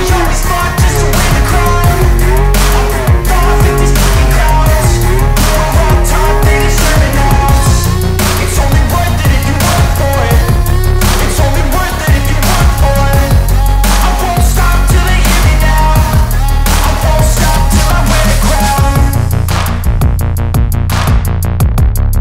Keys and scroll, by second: 7.7 space, 13.9 Escape.